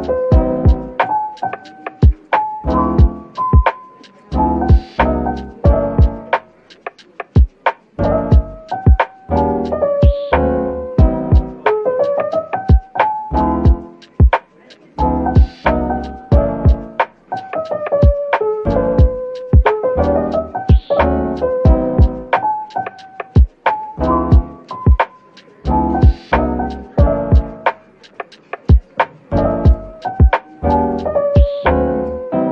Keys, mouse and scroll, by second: 5.5-5.9 scroll up 1, 5.9 middle click, 12.6-13.9 scroll down 1, 13.9-15.8 typing, 15.9 Return, 17.6-17.9 scroll up 1, 19.8-20.2 scroll down 1, 20.0-22.0 typing, 23.6 middle click, 24.8 scroll up 1, 27.1 typing, 29.4-31.0 typing, 32.0 middle click.